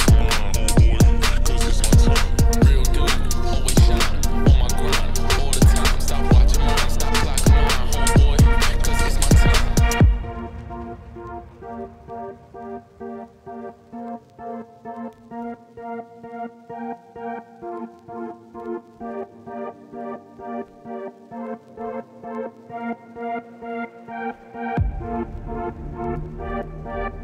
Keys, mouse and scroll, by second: 1.4-2.2 scroll down 3, 2.2-3.1 scroll down 1, 3.1-3.9 scroll down 1, 3.9-4.2 scroll down 1, 4.2 middle click, 4.6 scroll down 1, 4.7 middle click, 5.7 shift+a, 7.3-11.5 drag, 11.5 KP_1, 11.7 KP_3, 21.6 click, 23.4 middle click, 23.6-25.2 scroll down 1, 25.2-26.6 drag, 27.1-27.2 drag.